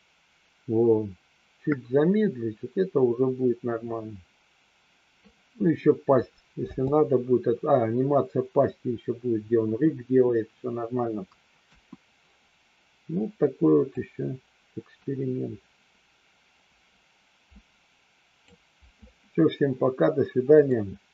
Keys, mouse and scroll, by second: 6.6 space, 11.6 KP_1, 13.8-18.4 drag, 20.7 click.